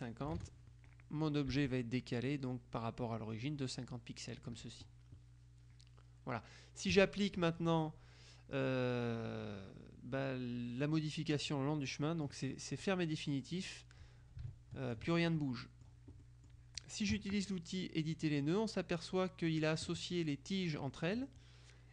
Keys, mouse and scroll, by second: 0.4 KP_0, 1.6 Tab, 7.0 click, 11.4 click, 12.8 click, 13.7-15.5 drag, 16.3 click, 18.3 click, 19.6 click.